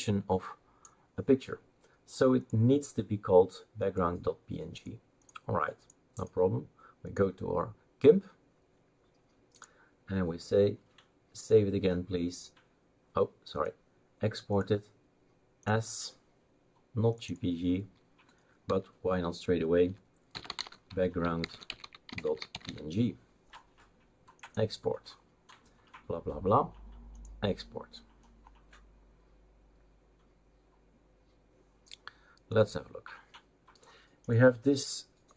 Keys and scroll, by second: 18.7-23.1 typing.